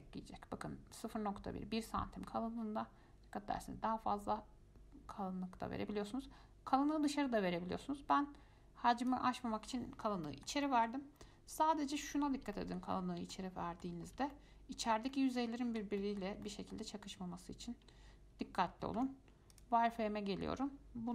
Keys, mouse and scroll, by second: 0.0-3.0 drag, 9.8-10.5 scroll down 6, 10.5-12.1 shift+middle drag, 12.1 click, 12.7-13.1 shift+middle drag, 13.1 scroll up 4, 13.5 shift+middle click, 14.3 scroll up 2, 14.5-17.0 shift+middle drag, 17.0-17.8 scroll down 2, 19.2 z, 20.1 middle click, 20.9-21.1 scroll up 1.